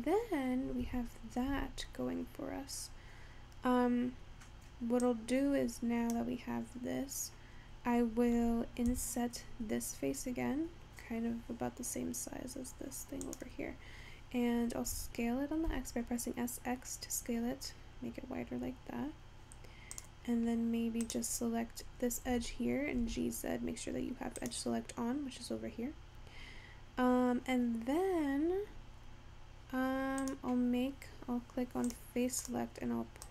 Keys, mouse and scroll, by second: 0.0-0.5 scroll down 5, 0.5-0.9 scroll up 3, 0.9 Tab, 1.6 Tab, 2.1 scroll down 2, 2.6-2.9 scroll up 2, 3.1-5.2 scroll up 2, 5.2 click, 8.9 i, 15.0 s, 21.1 click, 22.3 g, 30.2 click, 32.5 click.